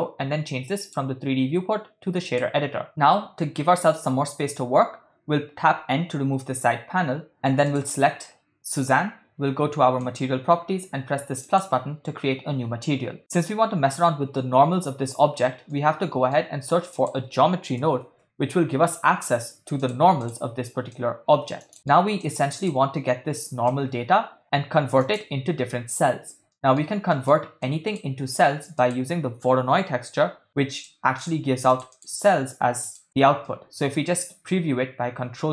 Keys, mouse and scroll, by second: 0.8-2.4 drag, 5.9 n, 7.7 click, 10.0 click, 11.4 click, 15.7 middle click, 16.9 shift+a, 21.0-21.7 drag, 21.7 middle click, 22.3-22.7 drag, 23.8-25.1 drag, 26.6 middle click, 27.1 middle click, 27.7 click, 28.8 shift+a, 32.2 ctrl+shift+click, 32.9 ctrl+shift+click, 33.5-35.5 middle drag.